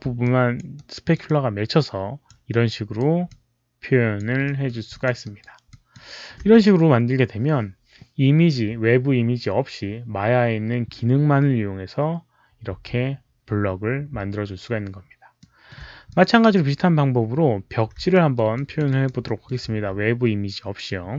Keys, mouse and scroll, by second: 0.1 alt+click, 0.6 alt+right click, 1.1-2.2 alt+drag, 2.5 alt+right click, 3.2 alt+click, 4.4 alt+middle click, 4.4 alt+right click, 4.8 alt+click, 5.1 alt+right click, 5.6 alt+drag, 12.0 alt+click, 12.0 alt+right click, 12.0 alt+middle click, 13.2 alt+click, 13.2 alt+right click, 13.2 alt+middle click, 15.3 alt+middle click, 15.3 alt+click, 15.3 alt+right click, 16.0 alt+click, 18.0 alt+middle click, 18.4 alt+click, 18.8 alt+right click, 19.1 alt+middle drag, 19.3 alt+click.